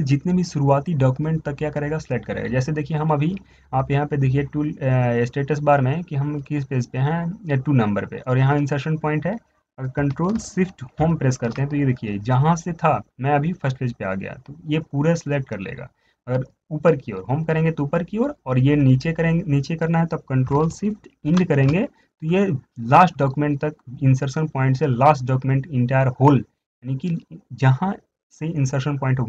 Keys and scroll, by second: 11.2 ctrl+shift+Home, 21.3 ctrl+shift+Home, 21.5 ctrl+shift+End.